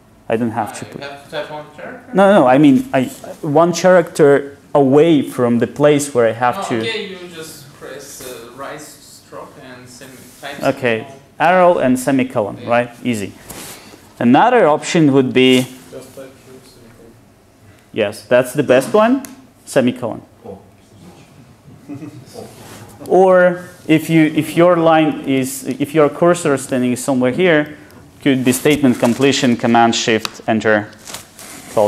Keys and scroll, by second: 14.3 super+z, 23.3 super+z, 30.3 ctrl+shift+super+Return.